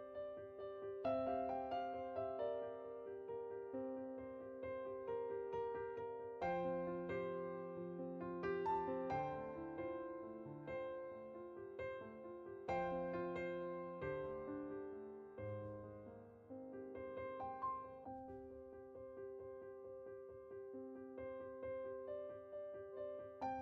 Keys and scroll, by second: 2.3-3.5 typing, 15.8 typing, 17.2-17.5 typing.